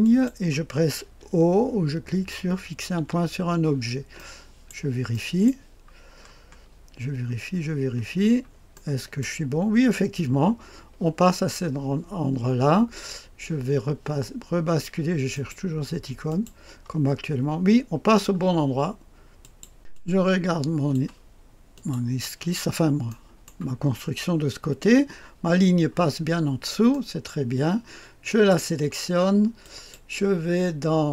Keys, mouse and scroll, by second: 0.8-2.9 scroll down 1, 2.9 o, 4.1-5.4 drag, 5.4 middle click, 6.1-7.0 scroll up 1, 7.2-8.1 scroll up 1, 8.1-8.7 scroll down 1, 8.7-9.9 middle drag, 15.2 click, 16.2 click, 18.0-19.3 scroll down 1, 19.3 click, 19.9-22.5 drag, 22.5-23.0 scroll up 1, 23.0 middle click, 23.9 click, 23.9-25.4 scroll up 1, 25.4-27.2 scroll down 1, 26.9-28.0 right drag, 28.2 click, 29.5 click.